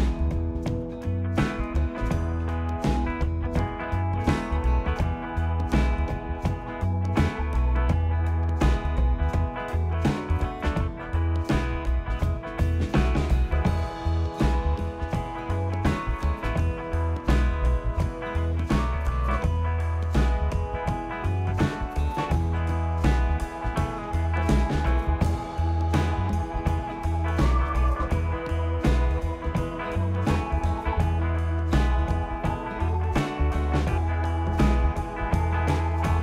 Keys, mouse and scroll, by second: 0.7 click, 0.9-2.1 scroll, 2.2-3.0 scroll, 3.0 click, 5.5 click, 6.5-7.2 typing, 8.7 click, 9.5 click, 11.9-12.9 scroll, 12.9 scroll, 15.1 click, 16.2 scroll, 16.9 click, 17.8 click, 19.3 click, 20.1 click, 22.0 click, 23.3 click, 23.7 click, 26.0 click, 26.5 shift+click, 27.5 shift+click, 28.4 shift+click, 31.2 click, 35.7 click.